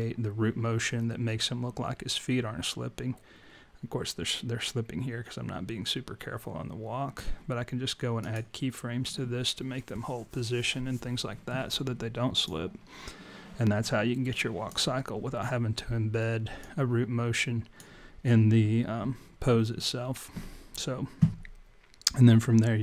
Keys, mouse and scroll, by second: 17.9 click.